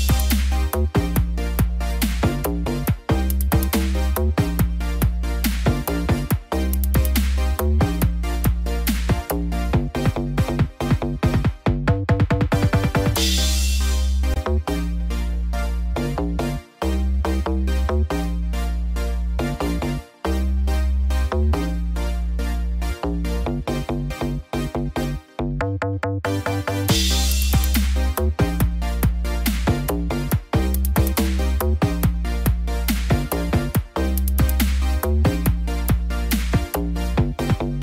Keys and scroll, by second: 2.1 ctrl+=, 19.1 ctrl+0, 24.4 ctrl+=, 26.8 ctrl+=, 30.4 ctrl+=, 31.1 ctrl+=, 33.7 ctrl+-, 36.4 ctrl+=.